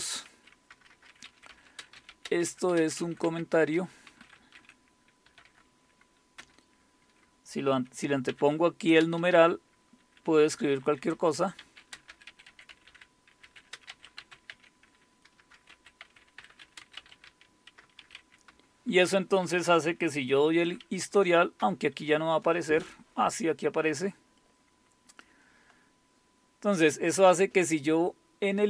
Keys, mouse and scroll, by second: 0.0-6.4 typing, 8.3-9.2 typing, 10.5-18.7 typing, 20.1-21.6 typing, 25.2-26.8 drag.